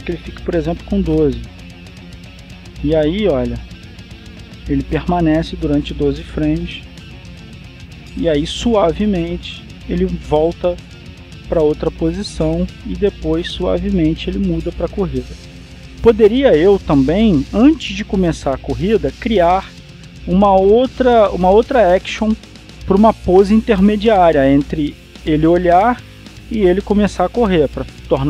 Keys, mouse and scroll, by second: 0.0 click, 1.7 KP_1, 1.9 KP_2, 2.2 KP_Enter, 3.4-16.4 drag, 16.4-17.0 scroll down 1, 18.0-18.6 scroll up 2, 18.6-20.6 drag, 21.6-28.2 drag.